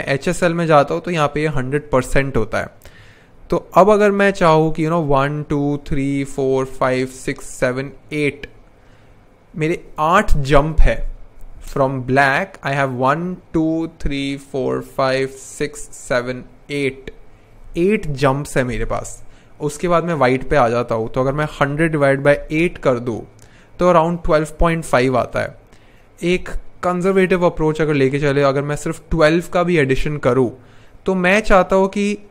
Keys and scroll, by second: 21.1-22.4 typing.